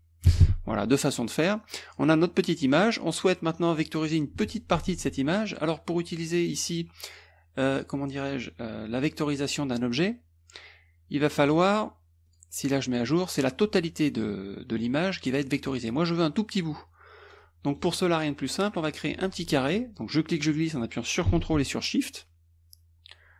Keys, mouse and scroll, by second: 0.2 KP_Subtract, 1.2 click, 6.5 click, 9.0 click, 11.3 click, 12.3 click, 17.3 click, 17.7 click, 19.0 click, 20.1-23.3 drag.